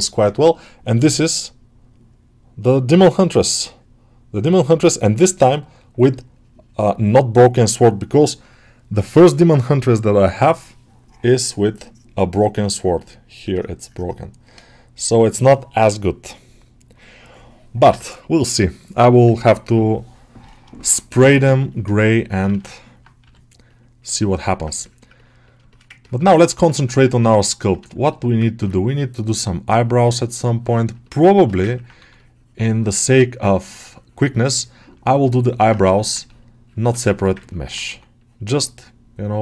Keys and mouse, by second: 21.7 middle click, 22.3 ctrl+z, 22.6 middle click, 23.1 g, 24.4 ctrl+middle click, 24.7 alt+middle click, 25.0 ctrl+middle click, 25.3 middle click, 25.6 alt+shift+middle click, 25.9 ctrl+middle click, 26.2 shift+middle click, 26.4 middle click, 27.0 click, 27.7 shift+middle click, 28.0 alt+middle click, 28.3 middle click, 29.6-30.9 drag, 30.9 alt+shift+middle click, 31.6 ctrl+middle click, 33.3 middle click, 34.8 shift+middle click, 36.9 shift+middle click, 37.3 ctrl+alt+middle click, 38.0 click, 38.4-39.4 drag.